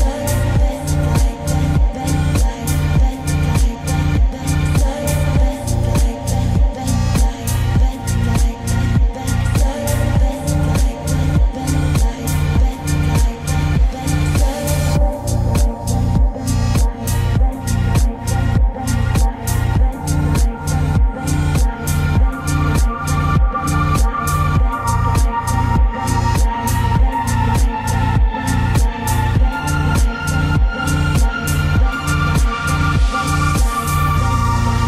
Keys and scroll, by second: 12.4 ctrl+z.